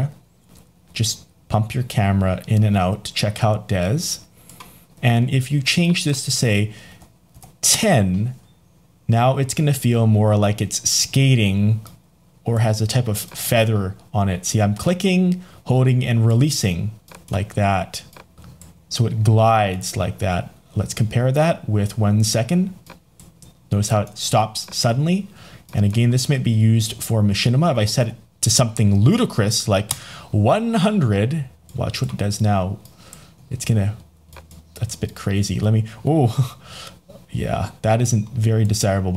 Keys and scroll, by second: 7.7 Return, 29.8 Return.